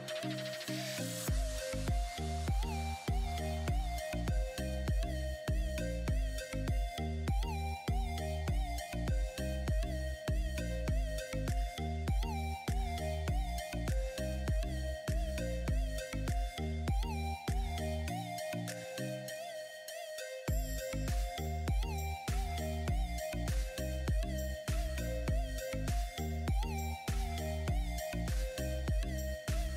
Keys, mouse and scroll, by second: 3.7 click, 5.7 click, 7.3 ctrl+z, 8.6-14.9 drag, 18.6-25.1 drag.